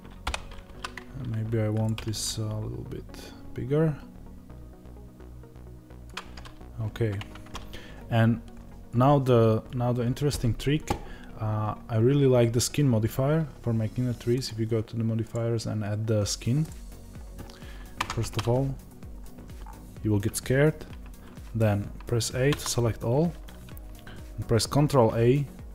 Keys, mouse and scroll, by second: 1.8 click, 1.9 g, 7.1 Tab, 16.6-18.5 drag, 17.9 Tab, 18.5 scroll down 1, 19.5-22.4 scroll up 1, 22.4 a, 23.1 scroll down 1.